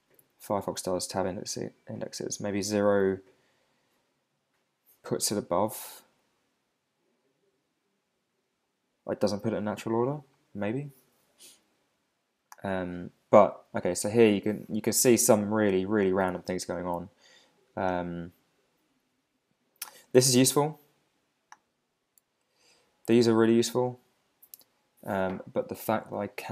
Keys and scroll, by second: 0.2 Up, 2.4 Down, 3.0 Up.